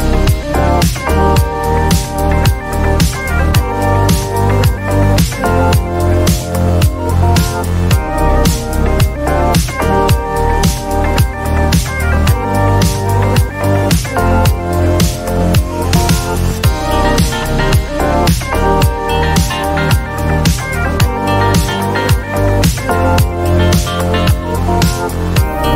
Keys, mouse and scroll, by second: 0.2 alt+click, 2.0 alt+click, 3.2 alt+click.